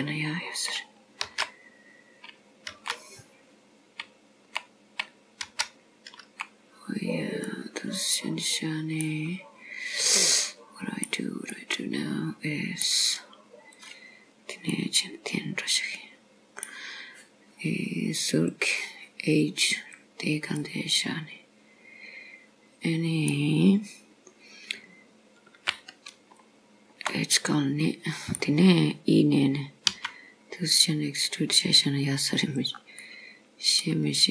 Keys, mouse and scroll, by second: 1.3 ctrl+z, 2.8 ctrl+z, 5.5 ctrl+z, 7.5 middle click, 9.5-10.2 scroll up 1, 10.2 middle click, 10.2 scroll up 1, 11.6 middle click, 13.8 click, 14.8 middle click, 18.3 click, 19.8 click, 20.7 middle click, 26.4 shift+click, 27.4 middle click, 30.0 e, 33.0 middle click.